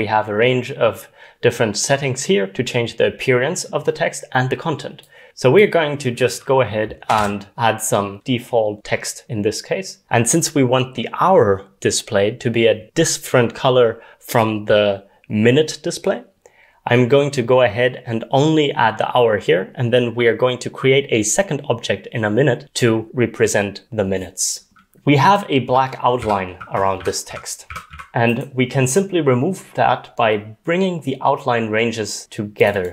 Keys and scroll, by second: 6.9-7.7 typing, 25.7-28.4 typing.